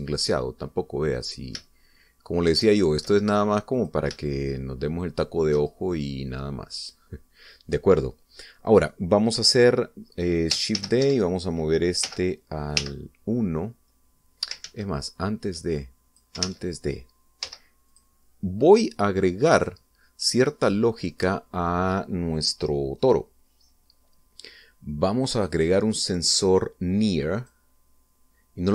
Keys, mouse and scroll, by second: 0.3-4.0 shift+middle drag, 4.6 click, 5.1-6.7 shift+drag, 6.8 shift+click, 11.6 shift+d, 11.8 Escape, 12.9 m, 13.6 1, 15.5 ctrl+z, 16.6 ctrl+click, 17.3 ctrl+z, 18.2 x, 18.7 click, 20.3 right click, 26.1 click, 28.2 click.